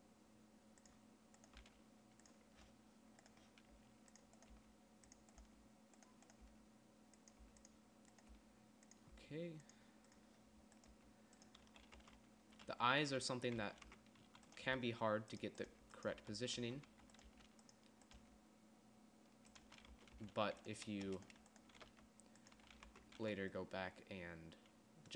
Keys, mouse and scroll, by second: 2.0 g, 4.1 g, 5.0 g, 5.9 g, 6.9 g, 7.9 g, 8.8 g, 9.5 g, 11.4 g, 12.1 z, 12.5 Tab, 13.1-18.7 typing, 14.4 Tab, 20.1 z, 20.4 Tab, 20.6 Tab, 22.3 g, 23.0 z, 23.3 Tab, 23.6 z.